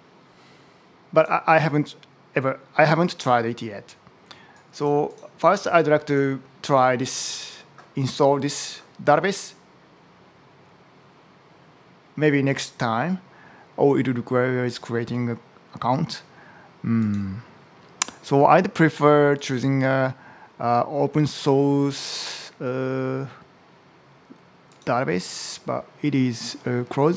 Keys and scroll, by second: 0.9 super+Tab.